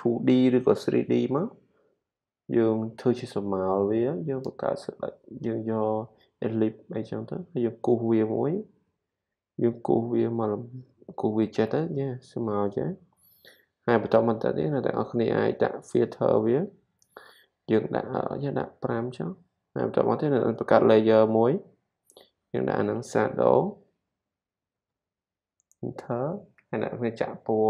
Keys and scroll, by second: 23.5-25.3 typing.